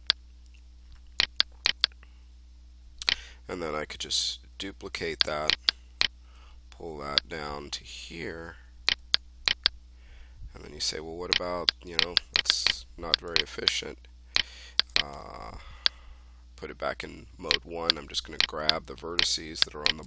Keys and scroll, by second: 4.4 ctrl+d, 15.1 1.